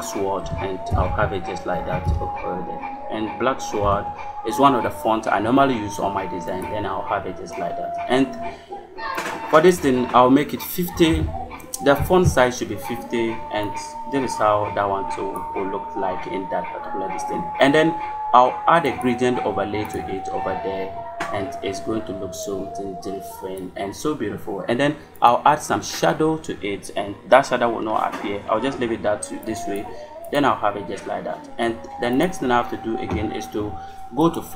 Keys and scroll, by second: 0.0-1.9 typing, 3.7 s, 10.6-11.5 typing, 11.8 Return.